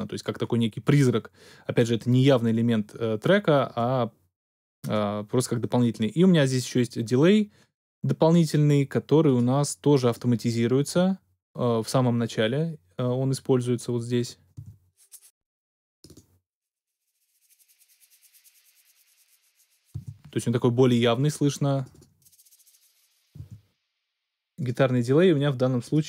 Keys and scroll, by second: 14.5 space, 19.9 space, 23.4 space.